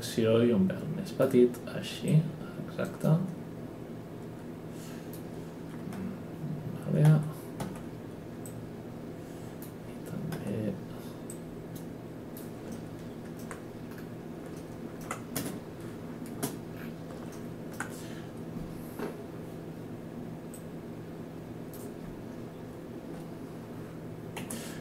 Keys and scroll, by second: 7.1 w, 10.3 e, 15.3 space, 16.3 space, 24.3 F10.